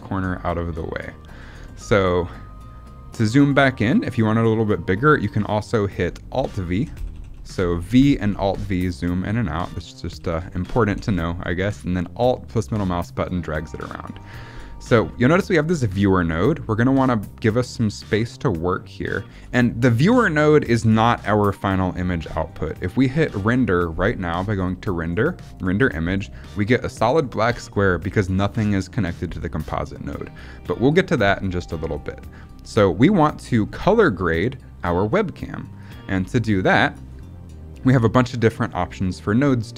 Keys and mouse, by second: 6.3 alt+v, 6.6 alt+v, 6.9 alt+v, 7.1 alt+v, 7.4 alt+v, 8.1 v, 8.3 v, 9.6 click, 10.1 alt+v, 10.3 alt+v, 10.8 v, 10.9 v, 11.7-13.9 alt+drag, 16.6-19.4 drag, 24.5-25.7 drag, 32.2 click, 35.7-37.0 drag.